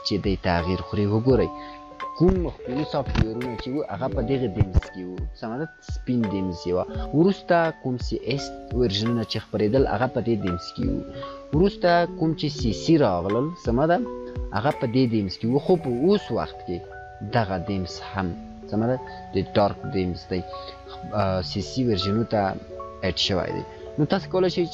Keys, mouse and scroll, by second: 6.8 click, 11.6 click, 16.2 click.